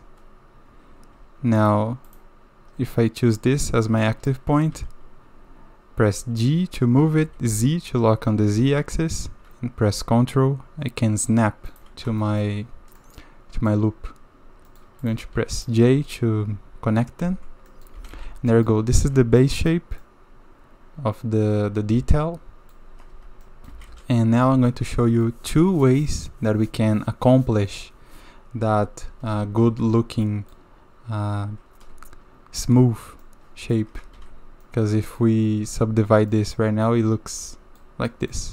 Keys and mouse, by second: 1.6 shift+click, 4.0 click, 4.7 g, 12.2 drag, 13.0-13.7 drag, 14.7 click, 15.0 click, 15.5 shift+click, 17.2 j, 17.7 click, 17.9 a, 18.1 a, 18.5 click, 19.0 Tab, 19.4-19.7 drag, 20.0-22.7 drag, 23.1 Tab, 23.4 middle drag, 23.7 a, 23.9 a, 24.4 middle click, 24.8 click, 29.6 Tab, 30.2 click, 33.2 click, 34.2 ctrl+2, 34.6 middle click, 36.3 middle drag, 36.8-37.2 middle drag, 37.2 drag, 37.4-37.8 middle drag, 37.8 click, 38.1 drag.